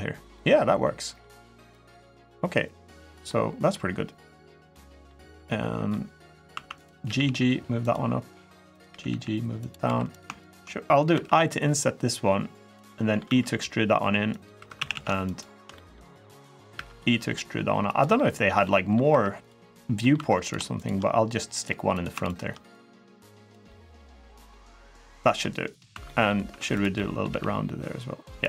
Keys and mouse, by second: 0.1 middle click, 1.5-2.9 drag, 3.0 middle click, 4.5 middle click, 5.7 middle click, 6.3 1, 6.5 click, 6.8 g, 7.0 g, 7.6 click, 8.5 click, 8.8 g, 8.8 g, 9.3 click, 9.6 3, 10.1 shift+click, 10.9 i, 12.4 click, 12.6 middle click, 13.1 e, 14.1 click, 14.3 3, 14.6 a, 14.7 a, 15.1 alt+shift+click, 15.5 click, 16.5 e, 17.6 click, 17.9 middle click, 18.4 middle click, 18.8 3, 19.2 click, 19.8 middle click, 19.9 2, 21.4 click, 21.7 click, 22.1 shift+click, 22.5 click, 23.4 middle click, 24.3 middle click, 25.7 2, 25.8 middle click, 26.3 1, 26.7 middle click, 27.1 g, 28.2 click.